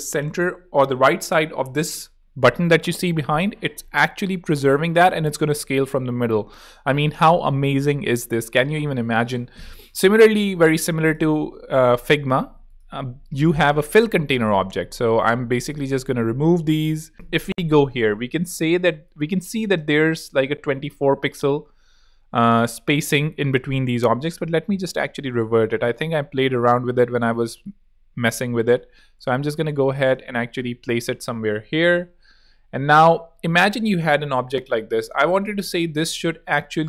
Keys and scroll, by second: 4.5 super+z, 5.2 super+Escape, 5.7 super+z, 6.7 super+Escape, 11.4 shift+super+g.